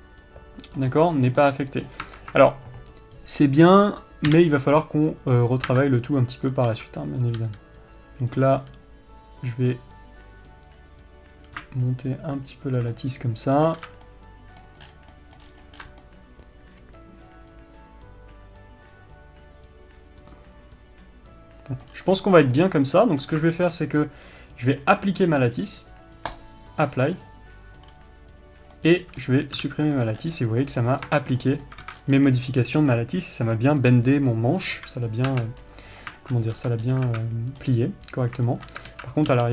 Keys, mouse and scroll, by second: 1.4-2.1 scroll up 1, 2.1 click, 2.3 scroll down 1, 2.6 Tab, 3.9-4.3 scroll up 1, 4.3-4.8 scroll down 1, 4.8 KP_3, 5.9 click, 6.2 Tab, 6.5-7.6 scroll up 1, 7.6 b, 13.3 shift+click, 13.5-23.5 middle drag, 14.3 alt+a, 14.4 scroll down 1, 15.4-15.7 scroll down 1, 16.0 scroll up 1, 16.3 scroll down 1, 22.4-22.8 scroll up 1, 23.2 scroll down 1, 23.5 click, 23.7-24.0 scroll up 1, 24.0-26.9 shift+middle drag, 26.9-28.4 drag, 28.4-29.3 scroll down 2, 29.3-29.8 middle drag, 29.8 click, 30.4 x, 30.7 scroll down 2, 30.9-31.5 middle drag, 31.2-31.5 scroll up 2, 31.5 click, 31.6 Tab, 32.0-35.3 middle drag, 32.3 alt+a, 32.5 scroll up 2, 32.8-33.5 scroll down 2, 35.3 KP_3, 35.8 Tab, 36.1-36.7 scroll up 1, 36.7 shift+middle click, 37.1-37.6 scroll up 2, 37.2 Tab, 37.6 alt+a, 38.1 scroll up 1, 39.0-39.5 shift+middle drag, 39.4 alt+z.